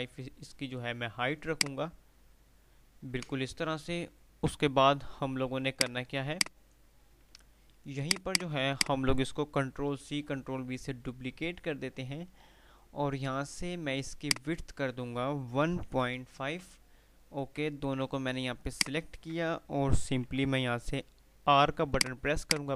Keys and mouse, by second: 4.0 F3, 6.0 click, 6.3 F2, 6.4 click, 6.7-7.4 F2, 8.1 click, 14.3-15.0 drag, 21.5 r, 22.1 click.